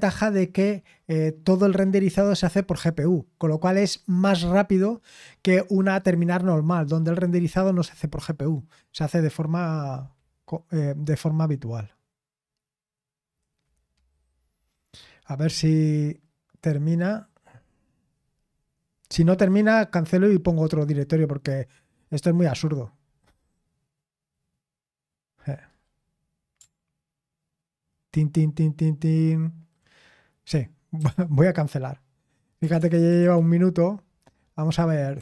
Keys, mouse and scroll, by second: 31.0 ctrl+c, 32.3-33.7 typing, 34.9-35.2 typing.